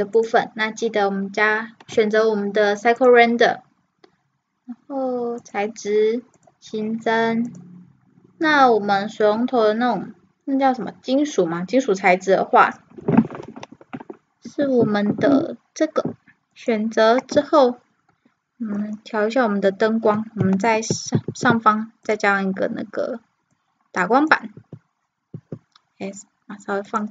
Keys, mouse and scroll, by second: 20.7 shift+c, 21.3 shift+a, 23.6-24.5 drag, 24.5 s, 25.4 s.